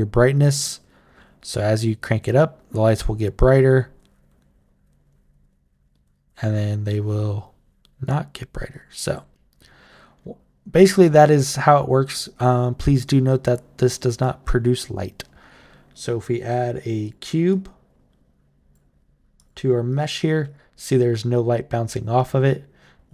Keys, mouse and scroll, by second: 0.1-7.9 drag, 8.5 click, 9.6-10.8 right drag, 11.1 right click, 13.2 click, 14.0-15.3 right drag, 16.8 click, 17.3-18.5 drag, 19.1 click, 19.7 right click, 20.2 click, 21.2 click, 22.0 right click.